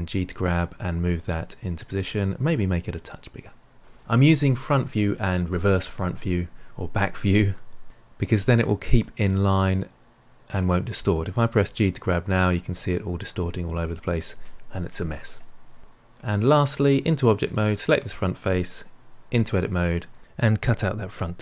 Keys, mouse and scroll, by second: 2.5 s, 7.8-10.8 middle drag, 11.5 g, 12.6-15.0 middle drag, 15.0 ctrl+z, 16.2 Tab, 17.3 click, 19.3 Tab.